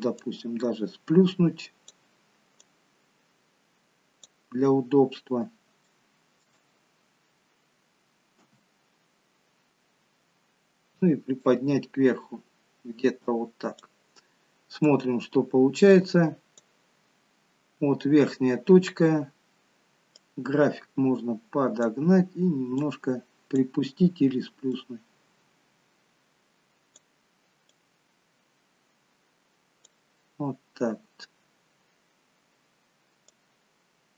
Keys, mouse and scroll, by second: 0.4 click, 2.8 click, 5.0-5.8 scroll up 5.